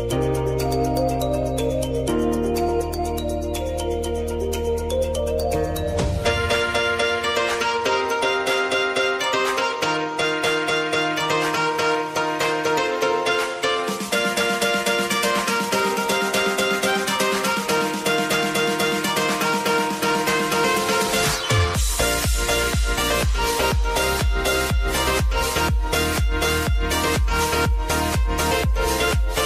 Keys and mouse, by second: 0.8 space, 2.0 click, 4.7 Return, 5.8 click, 6.2 space, 11.3 space, 11.8 click, 13.4 F4, 14.2 ctrl+a, 14.4 click, 15.9 space, 19.1 space, 19.4 click, 22.4 F4, 23.0 ctrl+a, 23.5 click, 24.7 space, 29.3 space.